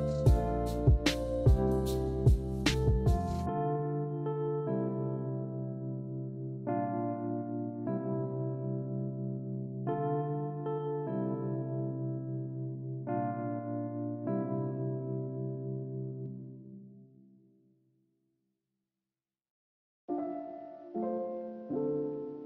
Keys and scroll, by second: 12.0 b, 17.7 a.